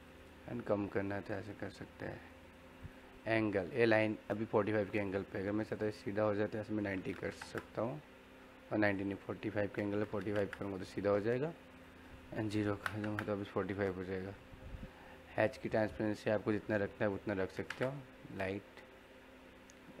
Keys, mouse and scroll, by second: 8.9 click, 8.9 typing, 11.7 click, 11.7 typing, 15.5 click, 15.5 typing, 18.9-20.0 drag, 18.9 typing.